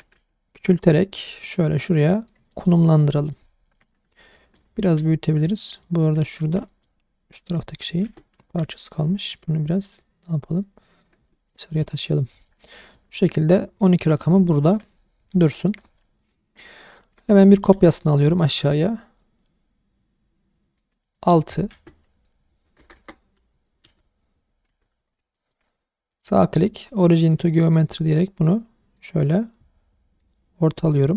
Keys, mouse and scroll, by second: 0.2 s, 0.8 click, 1.4 click, 2.5 shift+middle drag, 2.8-3.1 scroll up 2, 3.1 middle drag, 3.5 scroll up 1, 3.7 shift+middle click, 3.9-4.6 middle drag, 4.7 scroll down 1, 5.0 s, 5.4 click, 5.6-5.9 middle drag, 6.0 scroll up 1, 6.2 shift+middle drag, 6.7 middle click, 7.5 click, 8.0 Tab, 8.4 2, 8.8 alt+click, 9.2 middle click, 10.0 click, 11.2 Tab, 11.5 middle drag, 12.1 click, 12.5-13.0 middle drag, 13.2-14.4 scroll down 5, 13.8 click, 14.5 shift+middle drag, 14.9-15.5 scroll up 3, 15.5 shift+middle drag, 16.4 click, 16.8 shift+middle drag, 17.2-17.5 scroll down 1, 17.7 shift+d, 18.0 right click, 18.8 click, 21.0 shift+middle drag, 21.7 Tab, 22.8 BackSpace, 23.0 BackSpace, 23.8 KP_6, 24.7 Tab, 25.1 scroll up 1, 25.3 shift+middle drag, 26.1-27.3 drag, 26.1 right click, 28.1 click, 30.2 click.